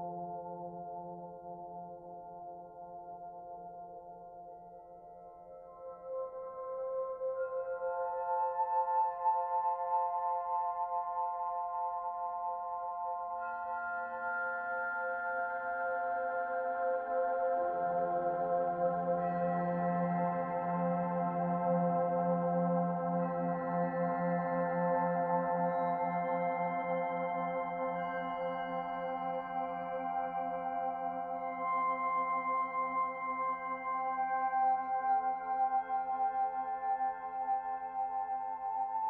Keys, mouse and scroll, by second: 0.8 middle click, 1.7 shift+middle click, 2.9 click, 3.8 click, 7.3 middle click, 8.1 shift+middle click, 8.7 middle click, 9.8 middle click, 9.9 shift+middle click, 12.1 click, 12.9 l, 15.4 shift+d, 16.0 click, 18.1 click, 20.4 middle click, 21.2 shift+middle click, 21.9 middle click, 23.0 click, 25.7 middle click, 27.4 middle click, 34.0 click, 35.0 alt+click, 37.9 alt+shift+click.